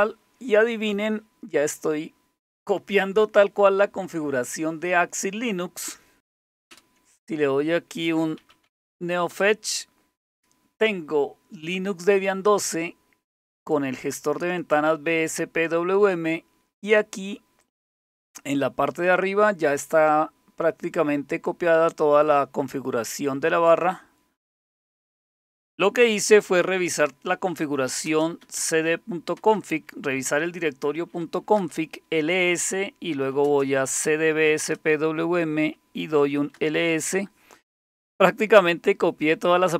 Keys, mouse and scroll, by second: 6.7 super+Return, 8.0-9.1 typing, 9.3 Return, 13.7 click, 17.6 click, 27.4-29.4 typing, 31.0-34.7 typing, 36.0-36.9 typing.